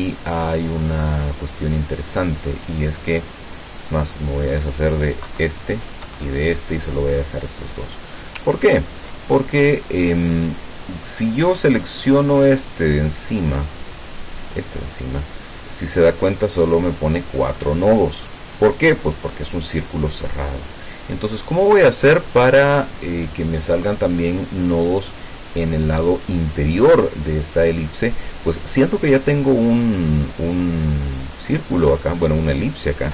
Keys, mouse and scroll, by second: 3.7 click, 4.4 click, 5.3 Delete, 5.7 click, 6.1 Delete, 8.7 ctrl+scroll down 2, 9.5-10.5 ctrl+middle drag, 11.8 click, 13.3 click, 14.1 click, 21.4 click, 32.5 click.